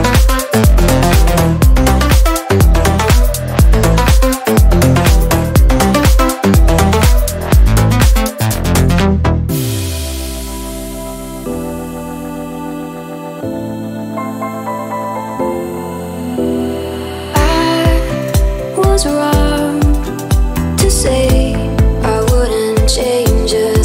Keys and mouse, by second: 1.8 click, 2.5-9.3 middle drag, 9.4-11.3 middle drag, 11.6 g, 12.9-15.9 middle drag, 15.9 0, 18.8 g, 22.2 0, 23.3 click.